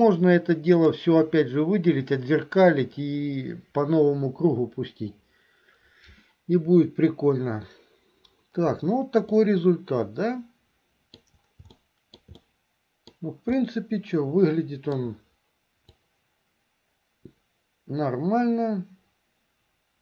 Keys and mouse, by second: 0.2 click, 9.5-11.5 middle drag, 12.0 shift+middle click, 12.5 middle click, 13.7-15.2 middle drag, 16.2-20.0 drag.